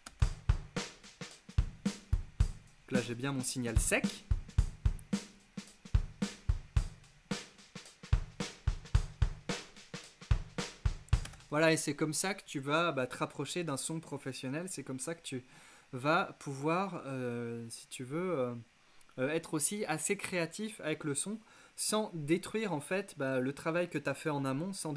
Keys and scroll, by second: 0.1 space, 11.3 space.